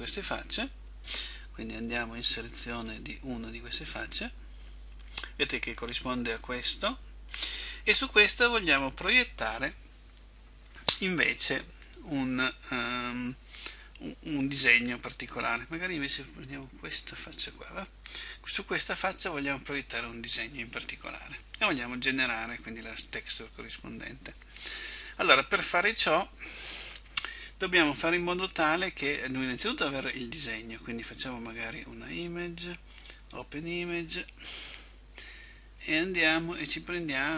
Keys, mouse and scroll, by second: 4.1 right click, 17.1 right click.